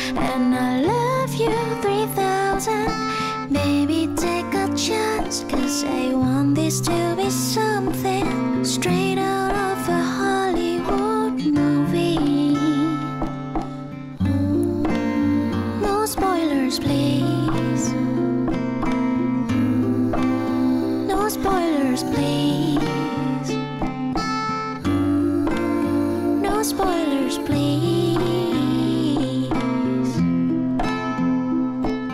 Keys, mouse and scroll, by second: 10.9-12.2 typing, 14.0-16.0 typing, 17.9-19.6 typing, 23.2 6, 23.3 Tab, 23.4 6, 23.7 Return.